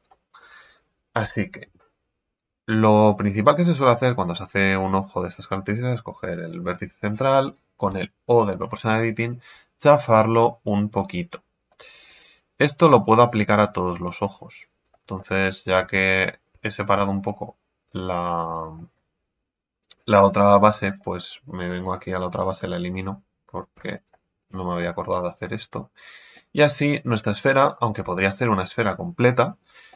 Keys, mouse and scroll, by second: 1.6 KP_3, 2.4-3.2 scroll down 2, 3.2-3.8 scroll up 3, 3.8 right click, 4.3-5.5 middle drag, 5.5-6.3 scroll down 1, 6.3 KP_3, 7.9 o, 10.1-14.1 drag, 15.1 middle click, 16.9 Tab, 17.2-20.3 middle drag, 20.8 click, 21.8-23.7 right drag, 23.7 x, 24.4 right click, 24.8-28.1 middle drag, 28.1 Tab, 28.4-29.9 middle drag.